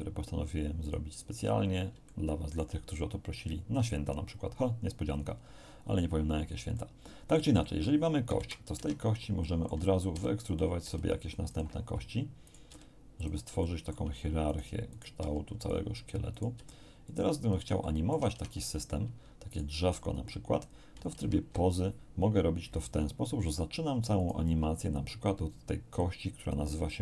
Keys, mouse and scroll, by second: 0.8 click, 1.6 scroll up 2, 2.0-2.7 shift+middle drag, 6.7-8.0 middle drag, 8.3 KP_1, 8.7 Tab, 9.4 shift+middle click, 10.1 shift+e, 10.4 shift+click, 10.8 e, 11.5 click, 12.4 right click, 12.7 e, 13.1 click, 13.6 shift+middle click, 14.5 right click, 14.9 right click, 15.1 e, 15.5 click, 16.3 right click, 16.5 e, 17.0 click, 17.8 shift+middle click, 18.3 shift+Tab, 19.5 right click, 21.1 ctrl+Tab, 24.1 right click.